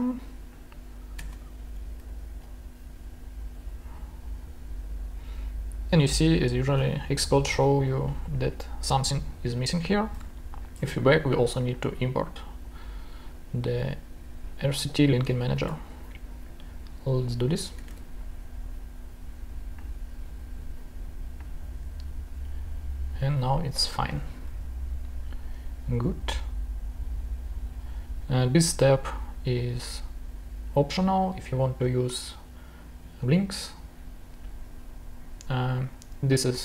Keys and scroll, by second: 1.1 Return, 2.0 super+v, 10.1 super+Tab, 15.4 super+c, 15.5 super+Tab, 17.6 Return, 18.0 super+v, 21.6 super+s, 24.5 super+Tab.